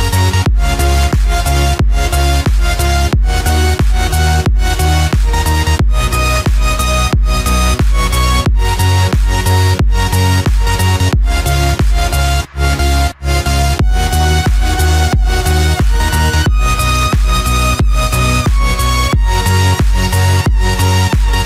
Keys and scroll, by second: 8.3 ctrl+-, 9.0 ctrl+0, 10.8 ctrl+=, 11.1 ctrl+space, 11.5 ctrl+=.